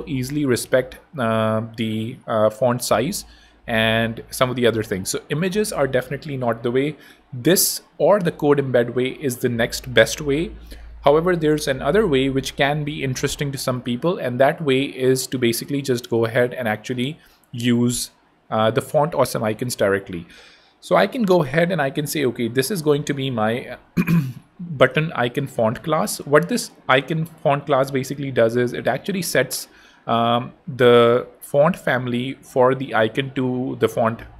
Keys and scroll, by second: 15.4 super+d, 17.3 super+a, 18.3 super+Home, 23.2 BackSpace.